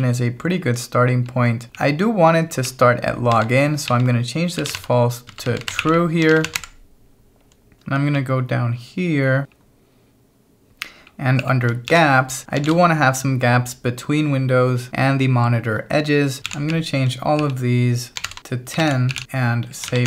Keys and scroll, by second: 0.0-2.2 typing, 3.3-13.1 typing, 16.5 ctrl+v, 16.8 j, 17.4 j, 18.8-20.0 typing.